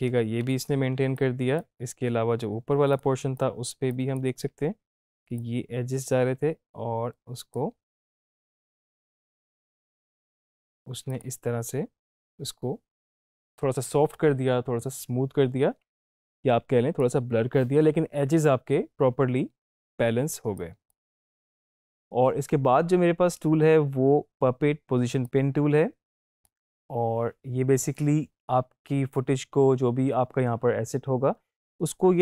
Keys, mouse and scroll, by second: 1.0 space, 1.2-1.8 click, 1.5 space, 2.9 click, 3.3 space, 3.4 click, 3.8 space, 5.4-7.6 drag, 11.1 click, 16.2 space, 16.3-17.3 click, 16.7 space, 20.2 space, 20.6 click, 20.9-21.2 space, 25.2-26.5 drag.